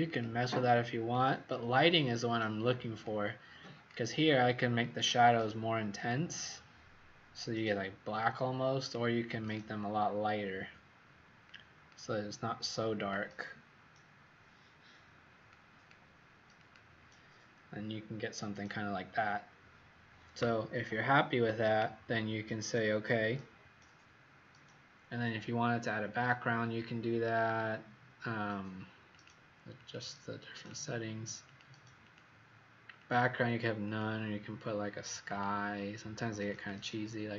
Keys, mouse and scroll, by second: 29.7 click, 30.5 click, 32.0 click, 33.0 click.